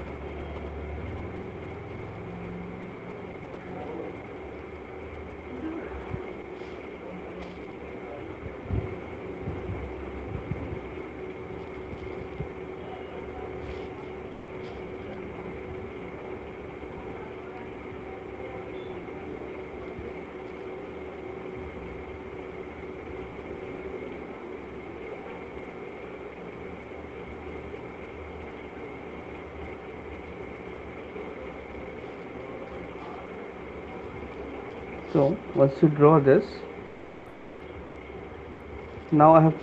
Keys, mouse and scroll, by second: 0.0 click, 0.9 shift+click, 2.8 alt+click, 4.5 click, 5.0 alt+click, 11.3 click, 32.0 click, 35.1 shift+click, 36.6 click, 37.9 alt+click.